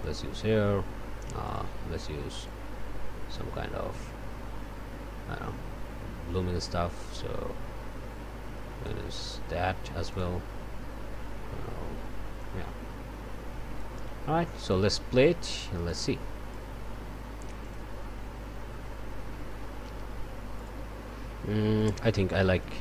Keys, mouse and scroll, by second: 1.4 click, 2.5-9.1 drag, 10.1 click, 12.4-14.0 drag, 14.6 click, 15.9 click, 17.6 click, 20.6 click, 21.8 click, 22.6-22.8 drag.